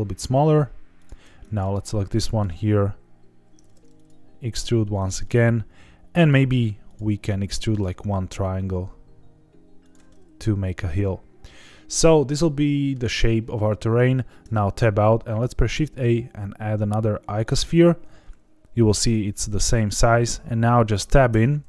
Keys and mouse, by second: 0.9 shift+click, 1.4 click, 1.8 middle click, 3.6 alt+e, 4.9 click, 5.2-6.3 middle drag, 7.3 middle click, 7.9 e, 9.8 click, 10.0-12.9 middle drag, 14.4 Tab, 15.5 shift+a, 21.3 Tab.